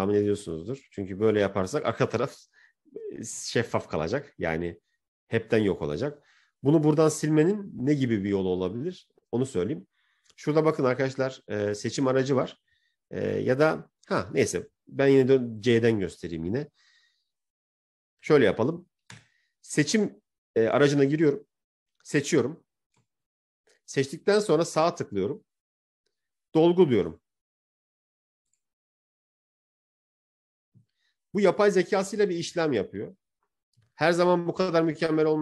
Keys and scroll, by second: 3.6 ctrl+z.